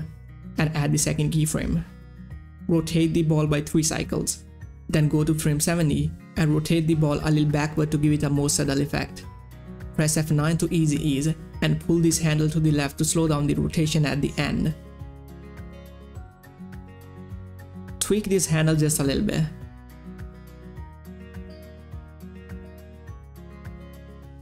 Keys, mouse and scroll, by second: 2.6 3, 2.7 Return, 4.1 Page_Down, 6.3 Page_Down, 6.6-9.4 drag, 11.2 click, 12.1-20.3 drag, 20.5-24.4 drag.